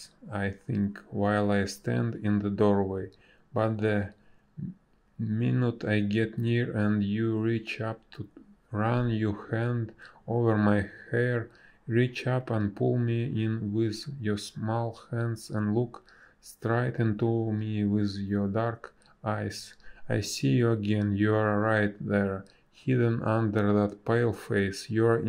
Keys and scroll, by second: 0.4 space, 1.6 space, 7.3 space, 15.2 space, 21.2 space.